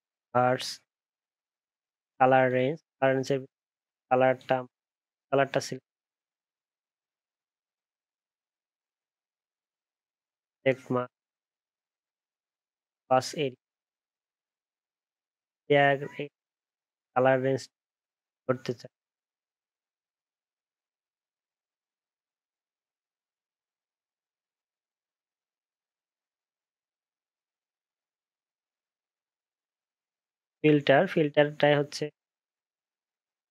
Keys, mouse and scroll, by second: 24.0 ctrl+d.